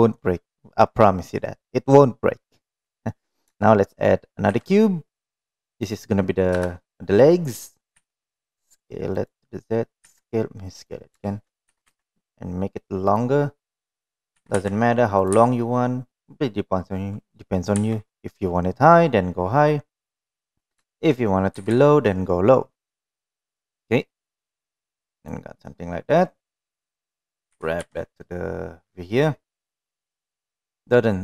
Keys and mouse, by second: 0.5-1.1 middle drag, 2.9-3.4 middle drag, 4.8 shift+a, 6.9 KP_1, 8.3 s, 10.5 s, 12.2 s, 14.7 s, 15.7 g, 21.3 shift+middle click, 22.0 g, 26.5-27.3 middle drag, 28.0 g, 30.4-31.2 middle drag.